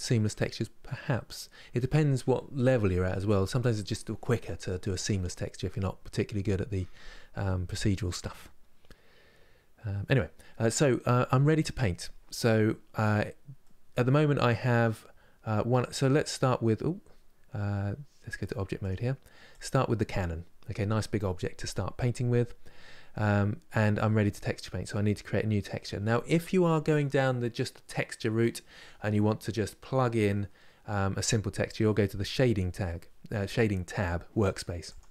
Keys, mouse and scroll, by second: 8.2-9.3 scroll down 1, 9.3-10.3 scroll down 1, 10.3-14.7 middle drag, 14.7 scroll up 3, 15.4 Tab, 18.6 click, 19.6-35.1 middle drag.